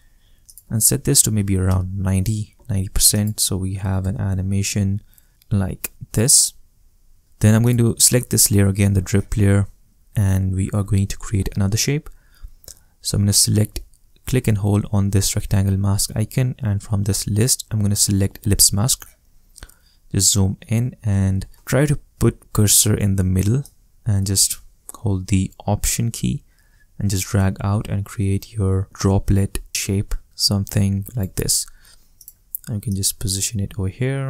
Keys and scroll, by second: 0.9-1.8 typing, 4.0 space.